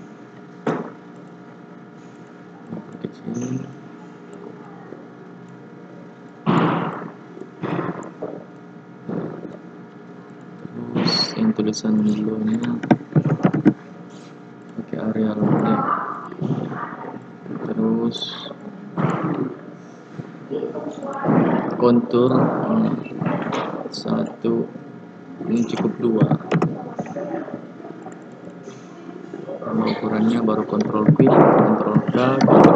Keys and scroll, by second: 31.0 ctrl+q, 31.9 ctrl+k, 32.6 ctrl+u.